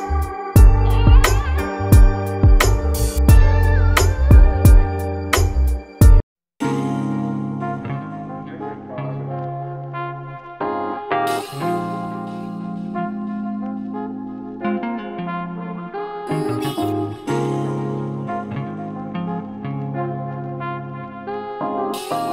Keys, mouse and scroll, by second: 0.5-2.0 scroll down 1, 2.0-2.9 scroll down 1, 5.8-6.2 middle drag, 6.2 scroll up 1, 6.3-6.8 scroll down 1, 6.8 s, 8.8 KP_7, 9.0 scroll up 7, 9.2-9.7 scroll down 1, 9.7 s, 10.6-11.3 scroll down 3, 11.3 middle click, 12.3 s, 13.5 scroll up 2, 13.7-14.5 middle drag, 14.5 KP_3, 14.8-15.4 scroll up 8, 15.4 g, 17.0-18.0 middle drag, 19.0 KP_1, 19.3 scroll up 2, 19.4 middle click, 19.8-20.4 scroll down 3, 20.0 middle click, 20.4 click, 21.1-22.1 scroll down 1, 22.1 click.